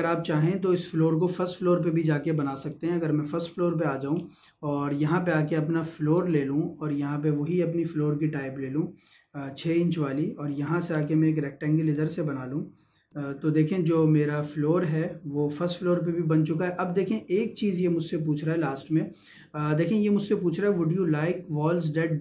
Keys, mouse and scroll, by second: 2.5 click, 2.7 click, 3.9-5.3 scroll up 1, 6.1 click, 10.9-11.3 scroll up 1, 11.9 click, 14.4 click.